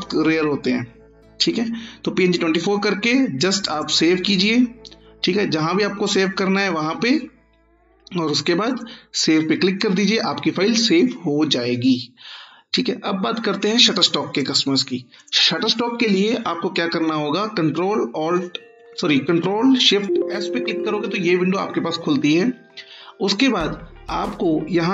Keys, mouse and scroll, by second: 3.7 click, 8.6 click, 13.6-14.6 click, 17.8 click, 18.3 ctrl+shift+s, 24.3 click.